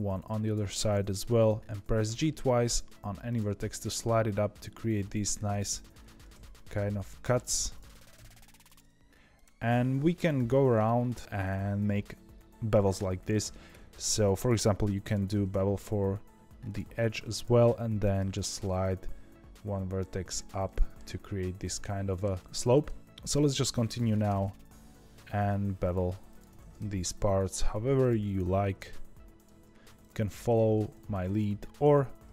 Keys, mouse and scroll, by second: 0.4 click, 1.7 g, 3.5-5.4 middle drag, 5.4 click, 5.9 ctrl+b, 7.6 click, 7.8 ctrl+b, 9.3 click, 9.6 middle click, 10.3 ctrl+b, 11.2 click, 13.6 2, 14.3 click, 14.7 middle click, 15.2 ctrl+b, 16.9 1, 17.3 click, 18.1 g, 20.6-22.4 middle drag, 23.1 click, 23.8 click, 24.2 ctrl+b, 26.2 click, 26.5 ctrl+b, 27.8 2, 27.9 click, 28.6 ctrl+b, 29.6 1, 29.9 click, 30.2 g, 31.2 click.